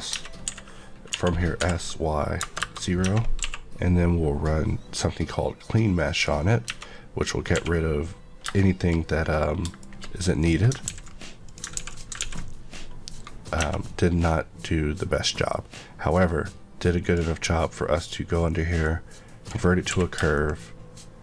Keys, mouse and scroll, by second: 0.2 Tab, 0.5-3.4 typing, 2.6 KP_Enter, 3.0 Tab, 4.4 click, 6.6 Tab, 7.5 Tab, 8.5 shift+middle click, 10.4 click, 10.9 x, 11.4 click, 11.8 ctrl+x, 11.9 click, 12.2 ctrl+x, 13.6 Tab, 13.8 middle click, 17.0 click, 18.8 click, 19.9 q, 20.3 shift+click.